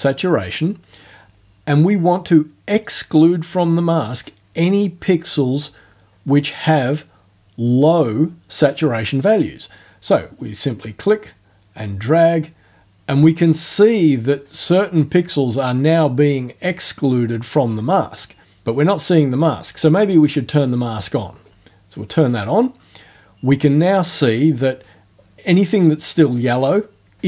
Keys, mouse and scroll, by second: 10.3-18.9 drag, 21.4 click.